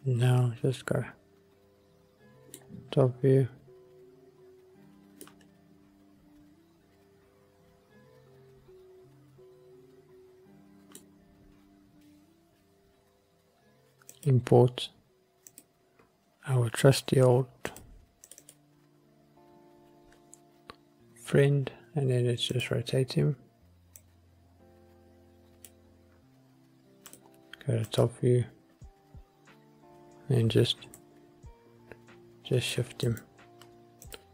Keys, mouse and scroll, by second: 3.0-3.4 scroll down 2, 3.8 scroll up 1, 5.4-11.1 middle drag, 12.0-15.9 drag, 22.6 click, 24.1 click, 27.3 click, 28.1 click, 30.9 g, 31.1 middle click, 33.2 click, 34.2 click.